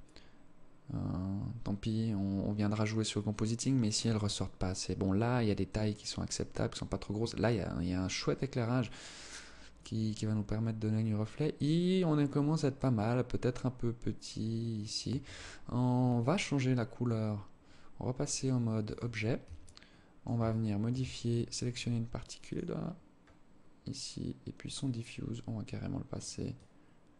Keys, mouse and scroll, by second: 14.4 Escape, 17.6 click, 19.0 alt+click, 19.9 alt+shift+click, 20.9 right click, 22.0 click, 23.0-23.3 scroll up 3, 23.3 scroll down 1, 24.0 click.